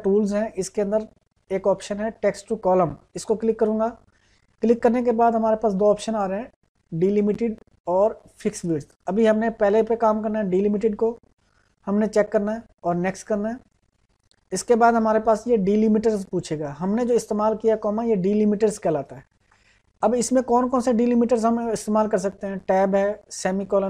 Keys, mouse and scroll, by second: 3.1 click, 13.7 click.